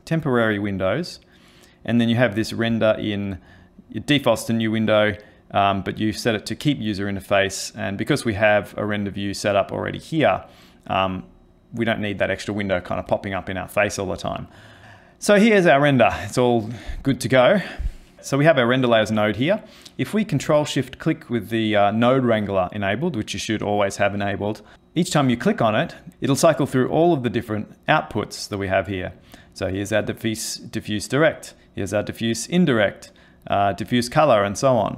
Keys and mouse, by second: 18.1 click, 24.7 ctrl+shift+click, 25.1 ctrl+shift+click, 25.8 ctrl+shift+click, 26.1 ctrl+shift+click, 27.6 ctrl+shift+click, 31.3 ctrl+shift+click, 33.1 ctrl+shift+click.